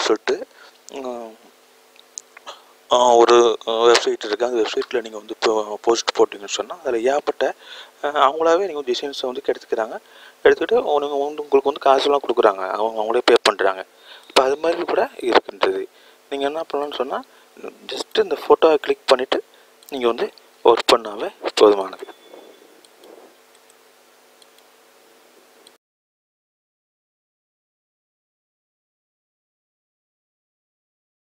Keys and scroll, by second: 13.1 s.